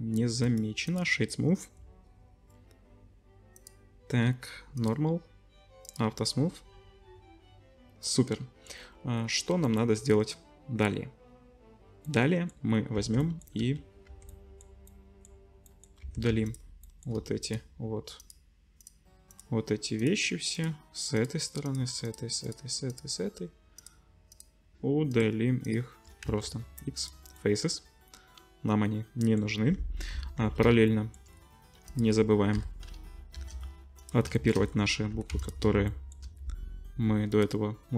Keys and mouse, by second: 0.5-8.7 right drag, 3.5 click, 4.8-5.9 drag, 8.7-16.3 drag, 12.9 Tab, 13.6 3, 14.1 Tab, 16.0 Tab, 16.3 3, 17.4 shift+middle click, 19.3 shift+middle click, 22.1 shift+middle click, 22.9 shift+middle click, 24.3 shift+middle click, 25.1 shift+middle click, 26.2 x, 30.1 KP_7, 31.3 click, 31.8 middle click, 32.5 l, 33.3 shift+d, 35.1 g, 37.4-37.9 drag, 37.4-37.9 middle drag, 37.4-37.9 right drag.